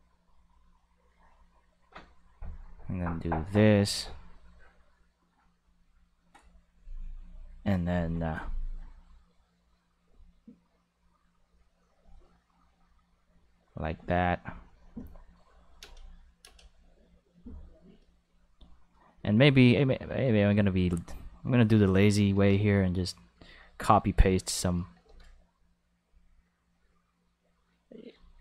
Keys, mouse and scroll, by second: 0.6 click, 2.1 click, 3.0 click, 4.9 click, 9.7 click, 10.8 click, 12.8 click, 13.8 click, 14.6 click, 15.6 click, 15.8 space, 16.4 space, 16.5-18.4 drag, 19.4 middle click, 22.3 shift+d, 23.3 click, 24.5 right click, 25.0 shift+d, 26.0 click, 27.8 right click, 28.2-28.4 shift+right drag.